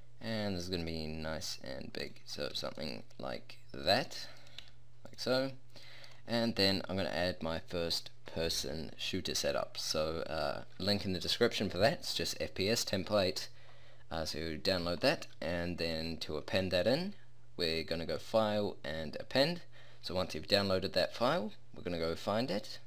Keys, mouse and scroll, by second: 2.6 a, 4.6 s, 5.0-7.8 drag, 15.0-16.0 drag, 16.0-16.6 middle drag, 16.8 middle drag.